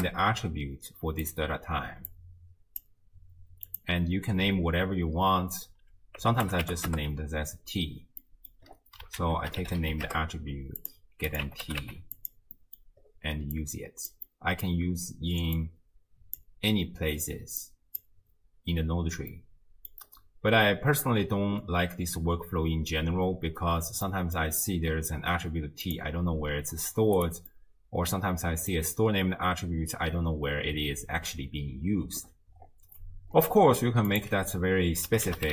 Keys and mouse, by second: 2.1-2.8 drag, 3.7-6.9 drag, 8.2 middle click, 9.2 ctrl+a, 11.3-12.3 drag, 12.6 middle click, 13.6 click, 14.3 middle click, 15.6-16.5 drag, 17.6 click, 19.3 middle click, 24.1 middle click, 25.9-27.2 drag, 27.6-28.7 middle drag, 34.1-35.5 drag.